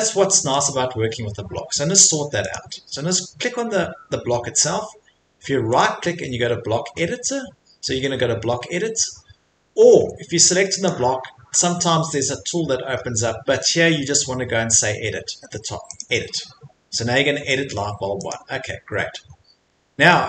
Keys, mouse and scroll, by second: 0.0 Escape, 0.6 click, 1.7 Escape, 2.1 click, 2.5 click, 5.8 right click, 9.5 Escape, 9.8 Escape, 10.1 Escape, 10.8 click, 16.0 click, 18.3 click, 20.1 middle click.